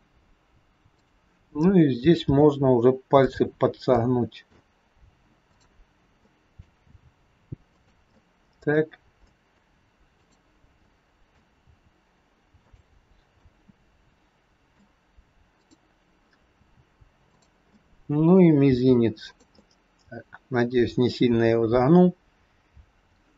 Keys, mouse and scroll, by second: 0.8 click, 2.2 r, 3.9 middle click, 3.9 scroll up 1, 5.5 click, 6.2 middle click, 6.7 r, 8.2 middle click, 9.2 middle click, 10.1 click, 10.8 middle click, 11.5 r, 13.1 scroll down 2, 13.3 middle click, 15.7 click, 16.6 r, 17.7 middle click, 18.7 r, 19.4 middle click.